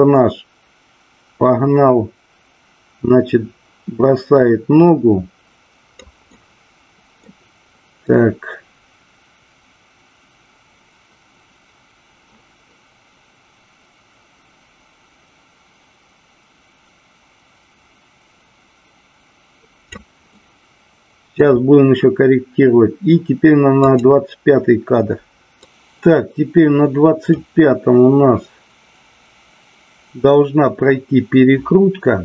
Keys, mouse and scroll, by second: 6.3-7.2 middle drag, 8.1-20.1 drag, 20.3 middle click, 24.0 click, 25.6-27.4 drag.